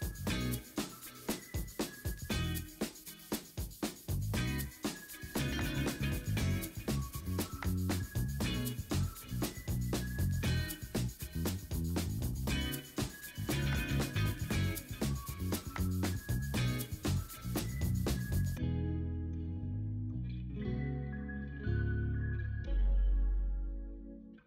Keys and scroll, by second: 0.0-0.8 typing, 0.0 ctrl+z, 2.6 b, 3.0 ctrl+z, 5.2 3, 5.5 ctrl+z, 7.5 ctrl+z, 10.3 ctrl+z, 10.6 2, 11.0 ctrl+z, 12.4 ctrl+z, 14.1 ctrl+d, 14.2 v, 14.9 ctrl+alt+z, 15.1 b, 15.6 ctrl+d, 18.7 v, 19.3 v, 20.4-22.8 typing.